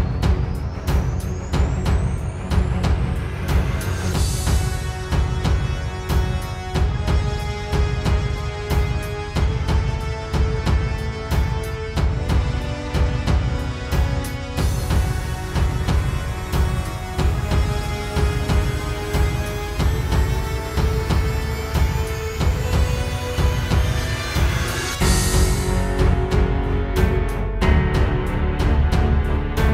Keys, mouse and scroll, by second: 7.0 click, 12.0 click, 24.2 space, 24.7 right click, 26.7 click, 28.5 click.